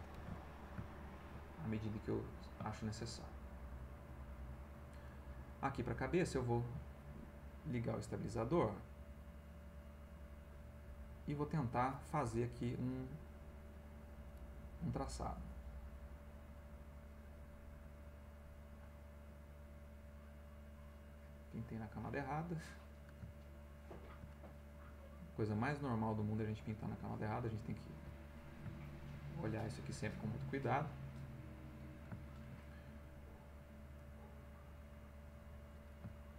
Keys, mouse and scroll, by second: 0.2 ctrl+alt+v, 0.5-3.6 ctrl+alt+middle drag, 3.8 ctrl+middle click, 6.2 click, 8.1-11.2 drag, 15.0-16.6 drag, 17.1 click, 18.3 click, 19.6 click, 20.4 click, 22.5 middle click, 23.3-24.8 ctrl+middle drag, 28.3-29.7 middle drag, 30.8 click, 31.8-33.0 ctrl+middle drag, 34.0-35.3 drag, 35.6 middle click.